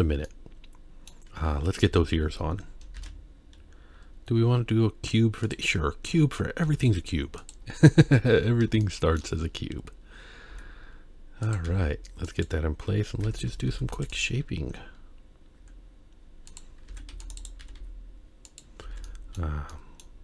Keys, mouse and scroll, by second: 0.3-1.1 middle drag, 1.9 KP_1, 3.0 shift+a, 5.7-6.3 scroll down 3, 6.6 g, 7.7-8.9 scroll up 6, 8.9 shift+middle click, 9.5-10.0 scroll up 1, 10.5 s, 11.9 g, 13.2 Tab, 13.7 ctrl+r, 15.6 z, 16.9 alt+a, 17.1 c, 17.6 g, 18.9 alt+a, 19.0 middle click, 19.7 middle click.